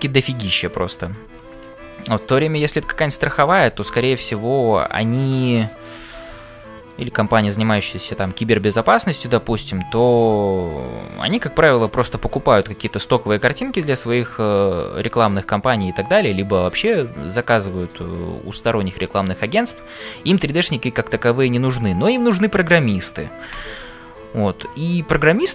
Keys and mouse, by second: 1.9 shift+middle click, 2.4-3.5 middle drag, 5.3 middle click, 8.8 click, 11.0 click, 11.5 g, 16.3 middle click, 17.3 click, 17.8 middle click, 21.2 middle click, 25.2 middle click.